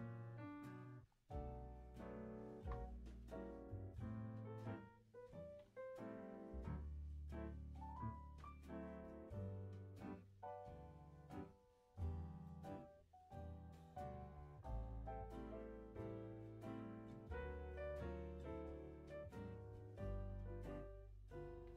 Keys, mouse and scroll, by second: 0.6 click, 1.0 shift+scroll up 1, 1.0-1.6 shift+middle drag, 1.6 click, 2.5 Delete, 3.1 click, 3.5-4.6 middle drag, 4.6-5.4 scroll up 3, 5.4 g, 7.4 click, 7.6-8.4 middle drag, 8.4-8.8 scroll up 4, 8.8-9.3 middle drag, 9.3 scroll down 1, 9.6 click, 9.8 Tab, 9.8-10.3 scroll down 1, 10.3-11.5 middle drag, 11.5 click, 13.0 click, 14.7 scroll down 1, 15.0 e, 16.9 click, 17.4 e, 21.2 click, 21.6 g.